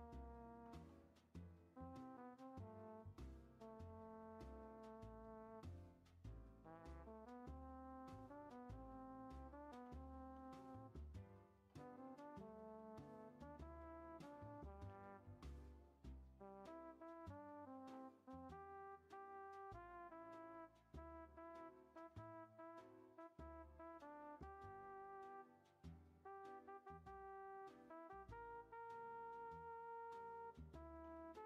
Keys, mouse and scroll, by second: 0.4 ctrl+a, 2.5 click, 2.7 middle click, 3.3 g, 4.5-5.1 scroll up 3, 4.6 middle click, 5.1 scroll down 2, 5.5 click, 6.5 g, 9.2 click, 9.5-10.1 shift+scroll up 2, 9.5 shift+middle click, 10.1 ctrl+a, 11.4 g, 13.1 scroll up 1, 13.2-14.8 middle drag, 14.8 ctrl+a, 17.7 ctrl+a, 20.5-21.2 middle drag, 21.2 scroll down 4, 21.6-22.1 shift+middle drag, 22.1 Tab, 22.2 scroll down 1, 22.5 click, 22.8 scroll up 1, 22.9-23.3 middle drag, 23.3 click, 23.6 scroll down 2, 24.4-26.0 drag, 26.2-27.7 middle drag, 27.7 click, 27.9 Tab, 28.2 scroll up 2, 28.6 click, 29.0-29.9 middle drag, 29.9 click, 30.8 ctrl+a.